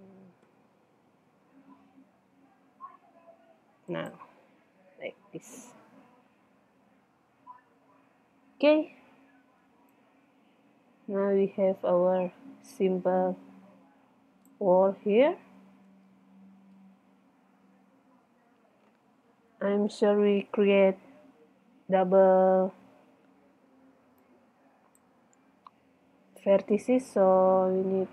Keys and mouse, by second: 4.0 click, 4.4-6.5 drag, 7.4-9.2 middle drag, 10.1 middle click, 11.1 middle click, 14.3-15.9 middle drag, 17.0 middle click, 18.1-19.9 middle drag, 24.2 click, 24.3-26.1 middle drag, 27.9 middle click.